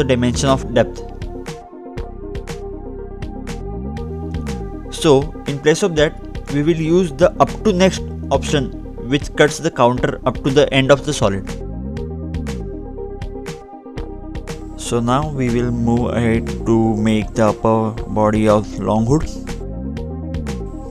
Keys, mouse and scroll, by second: 0.7-2.1 scroll down 2, 2.1-2.7 scroll up 1, 3.9-4.3 scroll down 1, 4.3-4.9 scroll up 2, 4.9-6.0 scroll down 2, 6.0 click, 7.8-8.4 scroll up 2, 8.4-9.1 scroll down 1, 9.3 click, 12.0 click, 12.2-13.6 scroll up 2, 13.6-14.0 scroll down 2, 14.6 ctrl+Tab, 15.9-16.3 scroll up 2, 16.6 scroll up 1, 17.1-17.6 scroll down 2, 17.7 middle click, 18.6-19.3 scroll down 2, 19.3 click, 19.8 middle click.